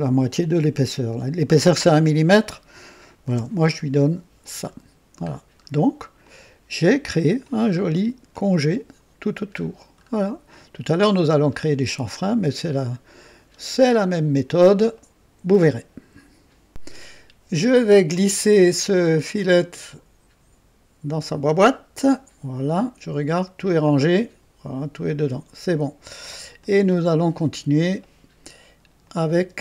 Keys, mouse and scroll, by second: 3.3 Return, 5.2 scroll up 1, 6.2-7.6 drag, 7.7-8.0 scroll up 1, 8.3 right click, 9.5-10.2 scroll down 2, 10.5 click, 11.8 right click, 13.2 scroll down 1, 13.8 right click, 14.9 right click, 16.7 click, 19.3-21.3 drag, 22.7 click, 26.5 click, 29.0 click, 29.5 space.